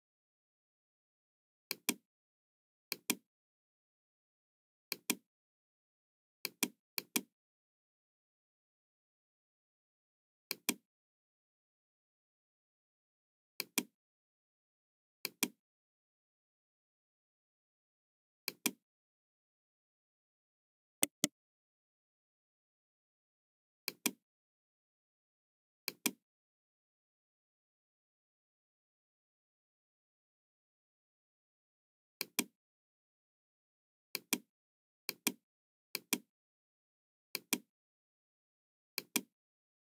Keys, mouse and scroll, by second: 1.6 click, 2.8 click, 4.8 click, 6.4 click, 6.9 click, 7.5 scroll up 1, 8.0 scroll down 1, 10.5 click, 13.5 click, 15.1 click, 18.3 click, 21.0 right click, 23.8 click, 25.7 click, 27.6-28.3 scroll up 2, 28.4-29.4 middle drag, 29.6-30.4 scroll up 2, 30.5 scroll down 1, 32.2 click, 34.1 click, 35.0 click, 35.9 click, 37.2 click, 38.8 click.